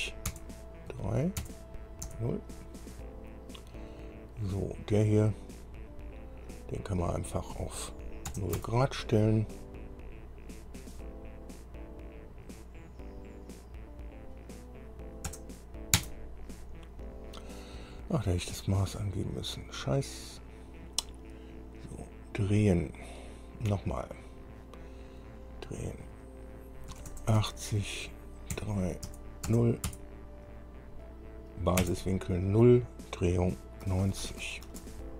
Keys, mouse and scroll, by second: 0.5 KP_Enter, 1.1 KP_3, 1.6 KP_Enter, 8.5 KP_0, 8.8 KP_Enter, 15.5 KP_0, 16.2 KP_Enter, 24.4 click, 27.2 KP_8, 27.6 KP_0, 28.8 KP_3, 29.4 KP_Enter, 29.7 KP_0, 30.1 KP_Enter, 32.0 KP_Enter, 34.1-35.1 typing.